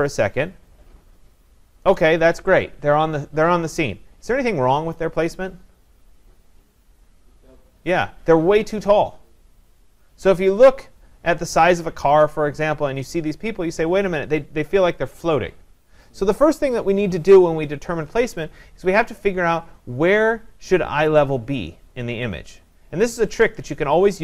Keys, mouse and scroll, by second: 0.1 click, 19.3 click.